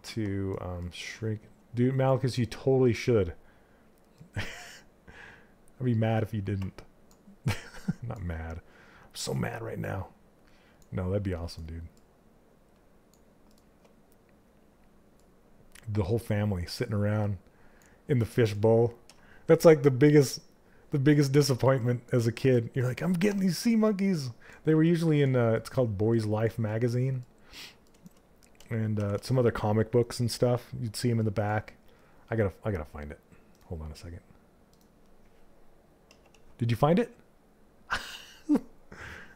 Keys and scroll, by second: 18.6 q, 28.4 shift+f.